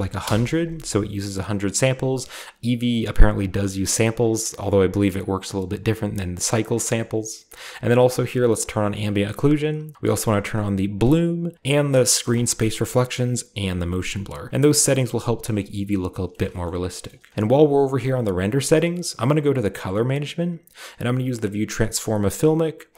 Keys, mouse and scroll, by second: 0.1 Return, 8.5-9.7 drag, 10.9-11.5 drag, 12.2 click, 12.7 click, 13.2 click, 13.6 click, 15.3 click, 16.2-16.9 shift+middle drag, 16.7-18.5 shift+scroll up 2, 17.0-18.5 shift+middle drag, 18.8-20.4 middle drag, 18.8-20.4 scroll down 1, 20.4-20.7 scroll down 1, 22.8 click.